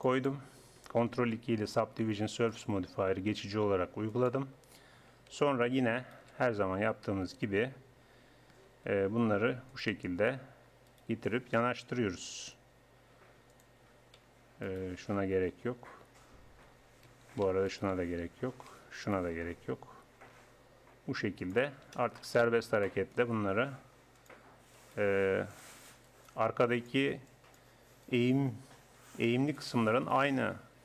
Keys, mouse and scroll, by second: 1.2 ctrl+2, 2.5-7.9 drag, 5.0 a, 8.7 g, 10.9-12.8 drag, 11.9 g, 14.7-16.7 drag, 15.7 g, 17.7-20.7 drag, 20.3 g, 22.7-23.8 drag, 23.8-27.3 right drag, 28.0 click, 29.0 g, 29.3 click, 30.1 click, 30.3 g.